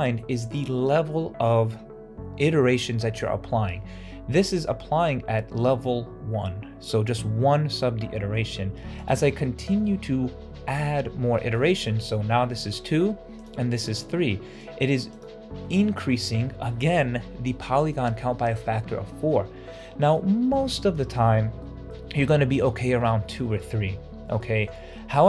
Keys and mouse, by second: 9.3 shift+click, 11.3 shift+middle click, 13.7 middle click, 15.0 click, 19.7 middle click, 21.5 middle click, 24.3 shift+middle drag, 24.8-25.2 middle drag.